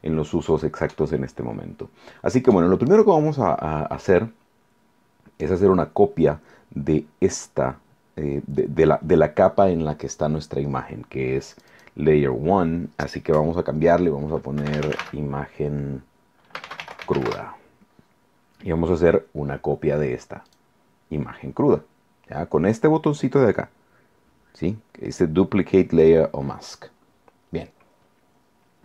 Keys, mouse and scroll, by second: 11.6 click, 14.4-17.7 typing, 20.5 click.